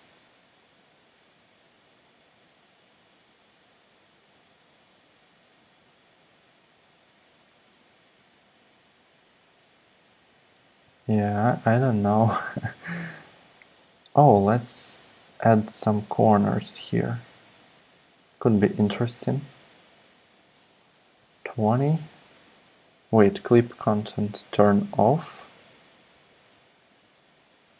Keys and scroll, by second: 10.2 super+z, 10.5 super+z, 10.9 super+z, 16.8 e, 17.2 r, 26.1 super+z, 27.2 super+z.